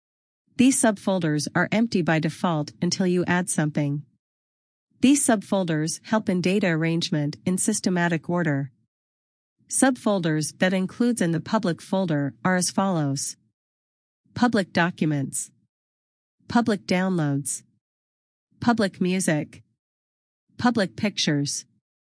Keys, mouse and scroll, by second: 5.0 click, 5.2 double click, 7.3 click, 16.1 click, 19.7 click.